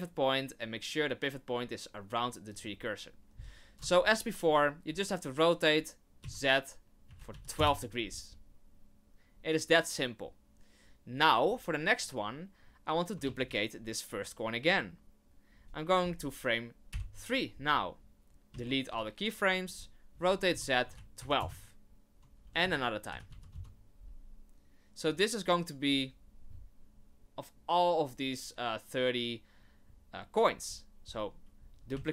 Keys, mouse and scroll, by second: 4.9 r, 11.1 right click, 13.2 shift+d, 16.9 Right, 18.5 x, 20.1 r, 22.4 r, 25.0 right click, 31.9 shift+d.